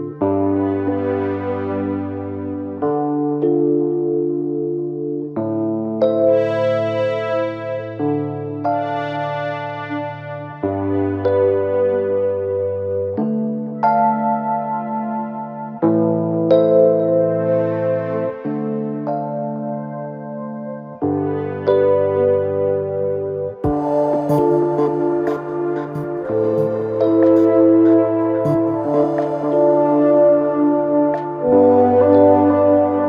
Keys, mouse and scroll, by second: 0.8 KP_1, 1.9 r, 3.9 2, 4.7 shift+click, 5.2 shift+drag, 5.8-7.7 right drag, 7.7-8.1 scroll up 2, 8.1-9.4 scroll down 2, 9.4 ctrl+r, 10.9 KP_3, 11.5-12.2 scroll up 2, 12.7 1, 13.8 click, 14.6 g, 15.5 click, 15.6 g, 16.8 click, 17.0 g, 17.9 click, 18.1 g, 19.7 KP_1, 21.5 2, 22.0 click, 22.9 f, 23.2 f, 23.7-24.6 scroll down 3, 24.6 KP_3, 26.1 KP_1, 27.0 shift+middle click, 27.6-28.2 scroll up 2, 28.3 1, 28.8-29.6 scroll up 3, 29.6 click, 31.0-32.0 shift+middle drag, 32.0 shift+drag.